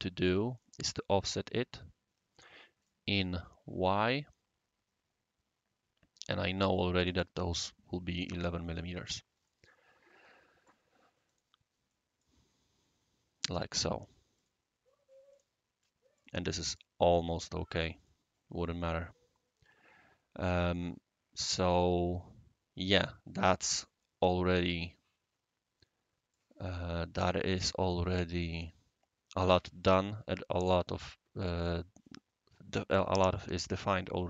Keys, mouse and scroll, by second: 0.5 click, 1.2 click, 2.8 click, 6.3 1, 6.4 1, 7.0 Tab, 9.4-10.7 right drag, 11.2 click, 11.9 right click, 13.4 click, 14.3 click, 15.3 click, 15.8-16.2 right drag, 16.7 click, 17.3 click, 18.0 click, 18.9-23.0 right drag, 23.4-23.8 middle drag, 24.0-26.3 right drag, 27.9-30.0 right drag, 32.0-33.0 right drag.